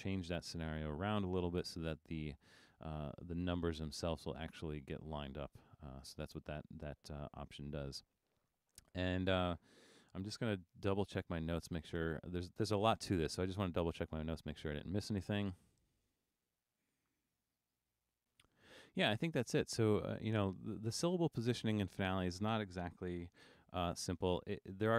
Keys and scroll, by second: 10.9 super+-, 11.4 super+-, 11.9 super+-, 24.6 super+=.